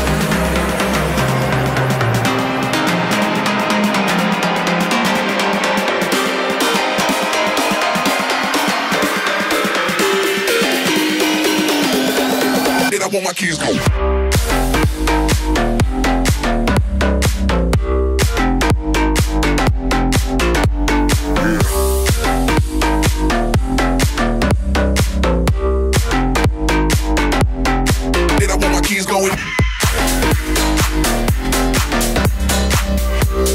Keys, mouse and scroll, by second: 0.2 click, 0.8 right click, 1.1 click, 2.0 click, 2.6 right click, 3.0 click, 3.8 ctrl+r, 4.3 right click, 4.5 click, 4.8 right click, 5.8 ctrl+r, 7.5 click, 8.6 middle click, 9.0 a, 9.9 ctrl+r, 10.3 a, 10.6-12.3 drag, 14.3 right click, 15.6 ctrl+r, 16.1 click, 16.9 middle click, 17.3 right click, 17.8 right click, 18.0 click, 18.3 click, 19.7 e, 21.7 click, 22.3 space, 22.9 a, 23.2 click, 23.8 right click, 24.1 click, 24.2 right click, 24.5-25.5 right drag, 25.3 x, 25.5 click, 26.0 a, 26.5 right click, 27.1 click, 27.2 middle click, 27.8 space, 28.2 Down, 28.5 a, 29.1 click, 29.6 j, 29.8 a, 31.2 right click, 31.9 click, 32.6 right click.